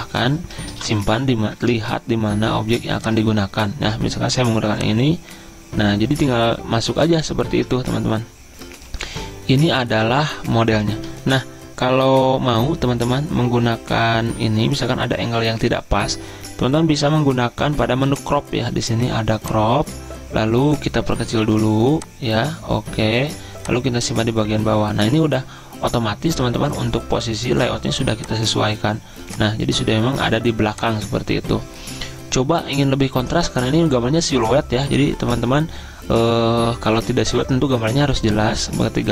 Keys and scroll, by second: 1.0 ctrl+v, 1.9 Return.